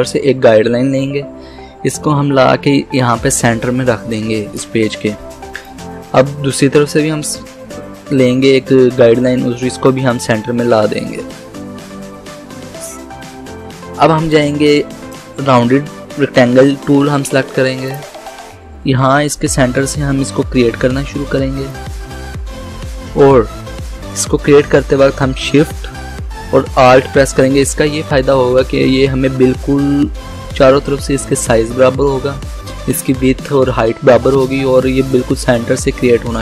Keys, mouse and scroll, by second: 14.4-17.6 drag, 17.9 click, 21.7-31.7 drag.